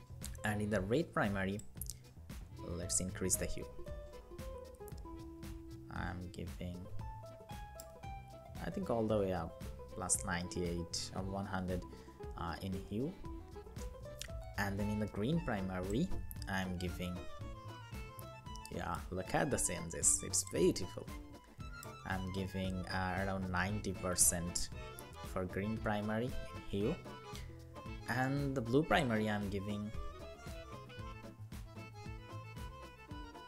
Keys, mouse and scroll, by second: 7.6 Up, 7.8 Up, 8.0 Up, 9.0 Down, 21.7 Down, 22.3 Up, 22.9 Up.